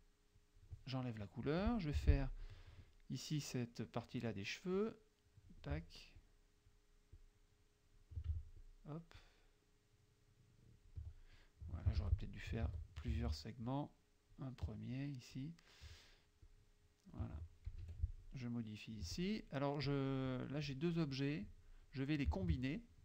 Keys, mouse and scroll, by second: 0.4 click, 2.0 F6, 4.9 click, 5.8 Caps_Lock, 6.2 click, 7.2 click, 8.6 click, 9.2-11.1 drag, 12.1 ctrl+z, 13.1 ctrl+shift+z, 13.7 shift+click, 15.0 shift+click, 16.5 shift+click, 17.9 F2, 18.3-19.4 drag, 19.9 click, 20.3 click, 20.7 click, 21.5 click, 22.4 shift+click.